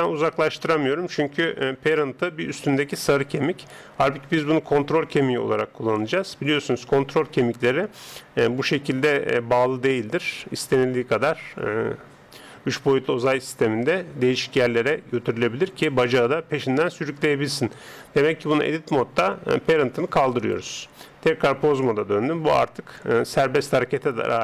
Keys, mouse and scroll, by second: 8.6 g, 17.9 Tab, 20.4 click, 21.4 Tab, 22.4 g.